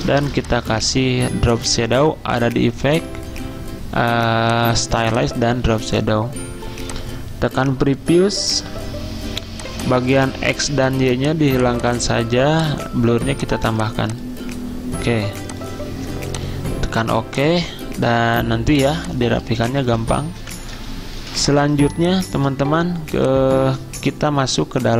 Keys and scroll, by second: 0.2 v, 10.7 0, 12.1 0, 18.7 z, 20.2-21.1 typing.